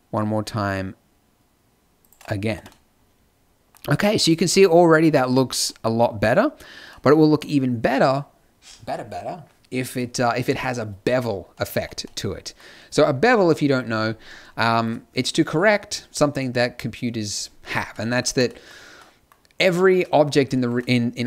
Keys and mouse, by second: 2.5 Tab, 7.0-12.0 middle drag, 19.5-21.2 drag.